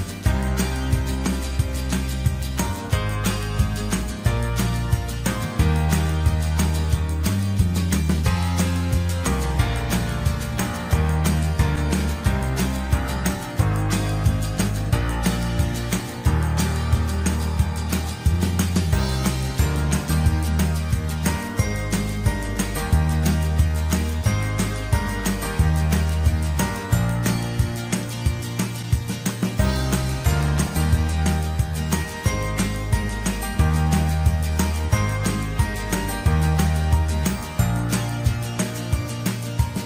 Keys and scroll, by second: 13.0 ctrl+0.